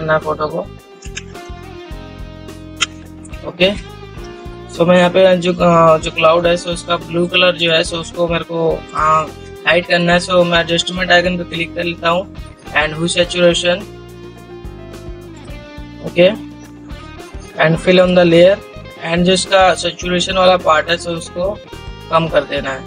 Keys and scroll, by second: 4.0 ctrl+0.